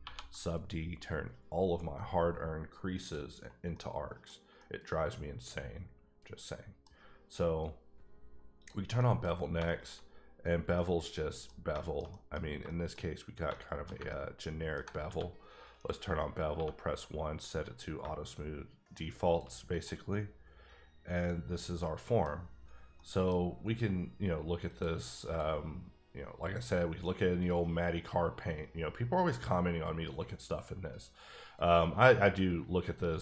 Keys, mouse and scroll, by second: 0.0 ctrl+1, 3.0 click, 3.5 scroll down 2, 3.7 middle click, 4.3 scroll down 1, 4.6 middle click, 8.6 click, 9.0 middle click, 9.2 scroll up 3, 9.6 shift+middle click, 10.0 scroll up 1, 10.4 scroll down 2, 10.7 middle click, 12.1 middle click, 13.0 shift+scroll up 2, 13.4 scroll down 2, 13.5 shift+middle click, 14.1 ctrl+middle click, 15.0 q, 15.7 click, 16.5 1, 19.2 shift+click, 19.5-19.8 scroll down 3, 19.8-22.0 middle drag, 22.9 middle click, 24.7 click, 25.2 click, 26.7 click, 27.0-29.8 middle drag.